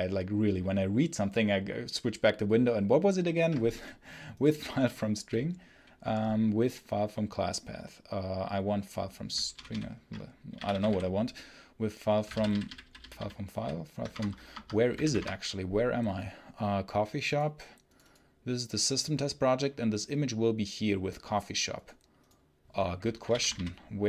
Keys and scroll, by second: 9.5 ctrl+super+l, 10.2-11.2 typing, 12.2 Down, 13.4 Down, 14.0 Return, 14.4 Escape, 14.9 alt+F1, 15.1 Return, 23.1 i, 23.4 ctrl+p.